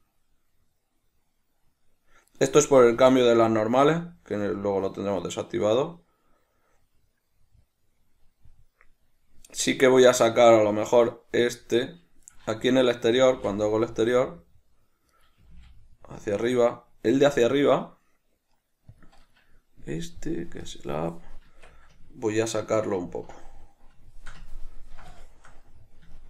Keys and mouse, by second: 2.7 right click, 3.3 g, 12.6 right click, 13.5 g, 15.5 right click, 15.7 g, 19.2 click, 19.5 right click, 20.9 click, 21.7 Tab, 22.3 middle click.